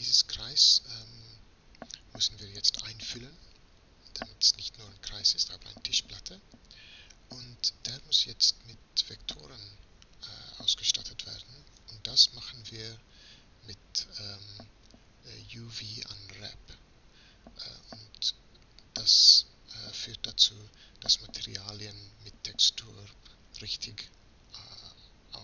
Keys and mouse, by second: 2.1 Tab, 5.6 f, 13.0-25.4 middle drag.